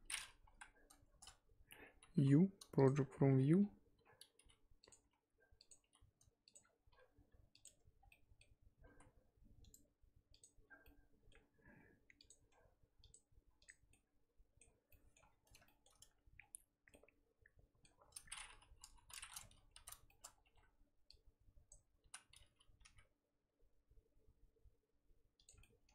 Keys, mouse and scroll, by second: 0.2 scroll up 2, 0.5 KP_1, 1.1 Tab, 1.3 a, 2.8-5.8 typing, 6.6-6.9 scroll up 3, 6.9 s, 7.6 Tab, 7.9 scroll down 4, 8.1 middle click, 9.1 z, 9.2-10.4 scroll down 1, 10.4 right click, 10.6 scroll up 2, 10.8-13.0 middle drag, 13.0 click, 13.9 middle click, 14.8-15.6 scroll up 5, 14.9 middle click, 15.6 shift+middle click, 16.0 scroll up 1, 16.3-16.9 scroll down 4, 16.9 middle click, 17.8 scroll up 1, 18.0 scroll down 1, 18.1 middle click, 18.4-18.8 scroll up 2, 18.8 KP_3, 19.3 scroll up 2, 19.5 Tab, 19.7 z, 20.1-21.7 shift+middle drag, 21.7 click, 22.1 z, 22.8 g, 25.6 middle click.